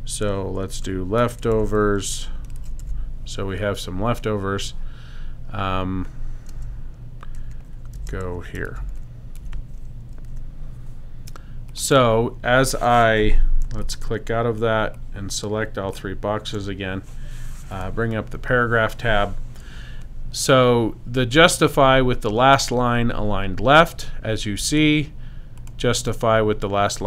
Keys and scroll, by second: 0.2-3.3 typing, 6.5-10.3 typing.